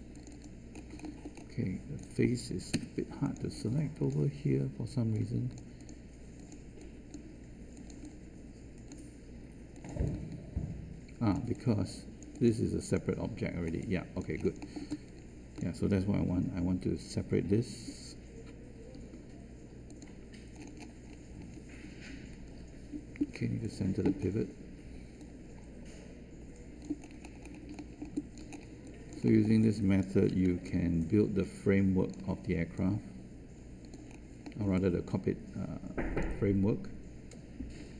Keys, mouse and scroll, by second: 2.7 Caps_Lock, 16.2 3, 30.2 1.